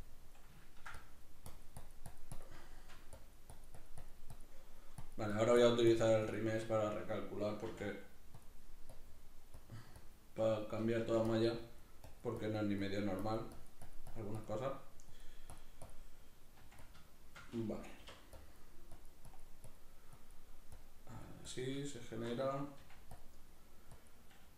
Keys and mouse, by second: 0.6 ctrl+middle click, 1.0-2.6 drag, 2.6 shift+middle click, 3.2-7.7 drag, 6.7-7.7 shift+middle drag, 7.7 f, 8.4 click, 10.6 shift+middle click, 11.0 f, 11.4 click, 16.6 click, 16.6 f, 17.1 shift+middle click, 18.0 k, 18.4-21.9 drag, 21.9 shift+middle click, 22.8 f, 23.2 click.